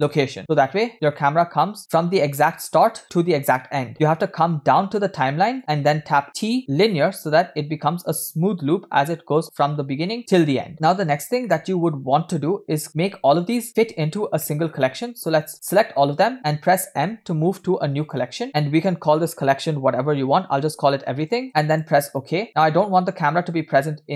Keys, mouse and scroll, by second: 0.4 KP_0, 1.1-2.1 middle drag, 1.8 scroll down 1, 5.6 click, 6.3 t, 7.9 space, 10.7 click, 11.5-12.8 middle drag, 13.7 scroll down 1, 14.4 middle click, 15.3-15.6 drag.